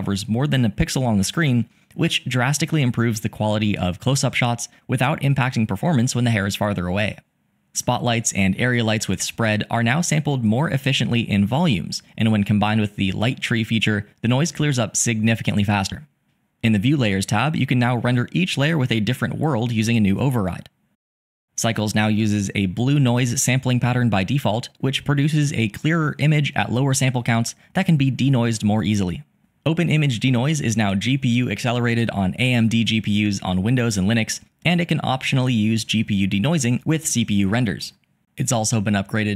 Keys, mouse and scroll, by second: 8.0 click, 10.1-11.1 drag, 13.0 click, 14.6 click, 17.0 click, 19.0-20.0 drag.